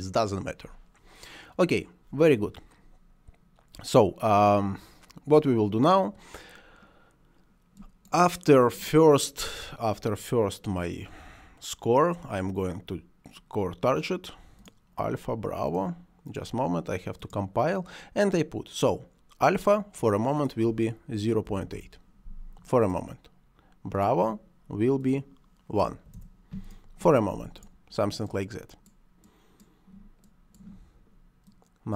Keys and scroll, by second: 21.3 ., 21.4 8, 21.6 Return, 25.7 1, 26.0 Return.